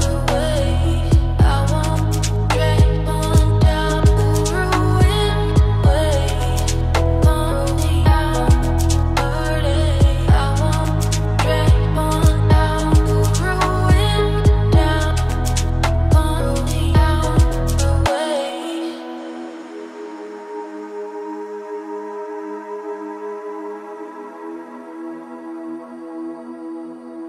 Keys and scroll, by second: 3.9 ctrl+z, 14.1 ctrl+space.